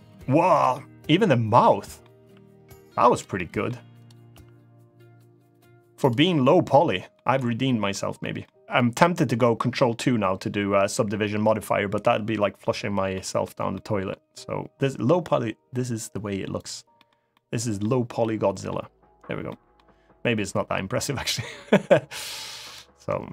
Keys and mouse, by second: 0.3 click, 0.5-1.7 middle drag, 1.9 r, 2.9 click, 3.1 middle click, 3.8 drag, 4.0 r, 5.7 click, 6.0-6.9 middle drag, 7.1-7.6 middle drag, 7.9 middle drag, 8.5 middle drag, 12.9 middle drag, 13.5-13.8 middle drag, 16.3 click, 16.7 middle click, 17.0-17.5 middle drag, 17.9-18.4 middle drag, 19.2 middle drag, 22.3 click.